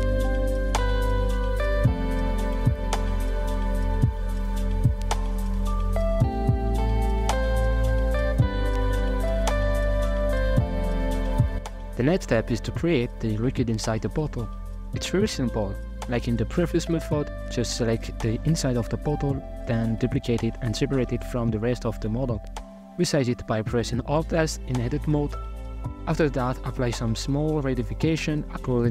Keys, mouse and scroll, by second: 1.3-3.0 middle drag, 3.0 shift+b, 3.8-5.0 middle drag, 5.0-5.3 scroll down 11, 5.5 click, 5.6 z, 6.1 middle click, 6.5-7.1 drag, 7.1-7.5 scroll down 6, 7.2 shift+middle click, 7.5 right click, 7.8 x, 8.0 middle click, 8.1-8.7 scroll up 4, 8.3 shift+middle click, 8.7 click, 9.4 middle click, 11.4 KP_Divide, 11.6 middle click, 12.0 scroll up 3, 12.5 right click, 13.3-14.8 middle drag, 14.8 ctrl+KP_Add, 15.2-16.1 ctrl+KP_Add, 16.3 ctrl+KP_Add, 17.0 alt+z, 17.3-18.6 middle drag, 18.6 shift+d, 19.9 p, 20.8 Tab, 21.2 right click, 21.9 Tab, 22.5 alt+z, 22.8 middle click, 23.0 alt+s, 23.8 Tab, 24.3 alt+right click, 25.8 f, 26.9 i, 27.5 g.